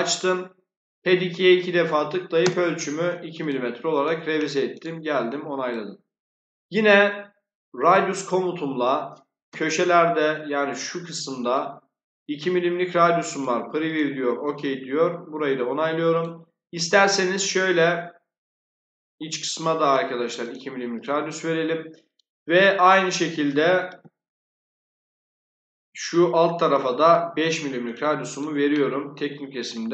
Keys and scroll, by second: 1.9 2, 2.3 Return, 9.4 2, 23.8 5.